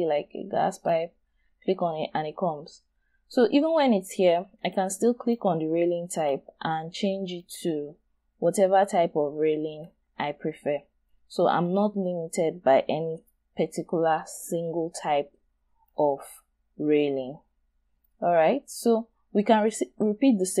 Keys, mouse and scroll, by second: 1.6-2.6 scroll up 1, 2.9-3.2 scroll down 1, 3.2-4.6 scroll up 1, 12.0-12.4 scroll down 1, 12.4-13.6 scroll up 1, 13.6-14.4 scroll down 1, 14.4 scroll down 1, 14.6 shift+right click, 16.2 scroll up 1, 17.0 scroll down 1, 18.0 shift+right click, 19.0 shift+scroll up 2.